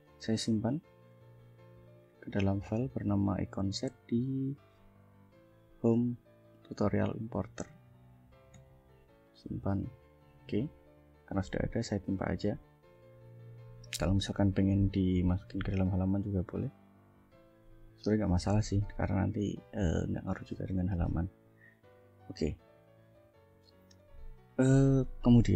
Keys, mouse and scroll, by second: 0.1 ctrl+shift+s, 2.2 click, 8.6 click, 10.2 click, 12.0 ctrl+scroll down 2, 12.5 ctrl+scroll up 2, 13.3 scroll up 2, 13.8-14.8 drag, 15.1-18.1 ctrl+drag, 18.7 ctrl+s, 21.8 shift+scroll down 2, 23.3 click.